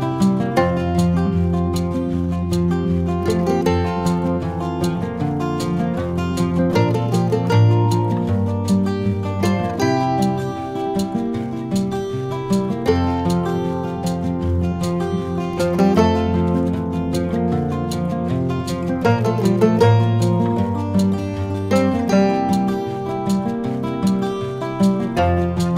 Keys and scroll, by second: 4.5 v.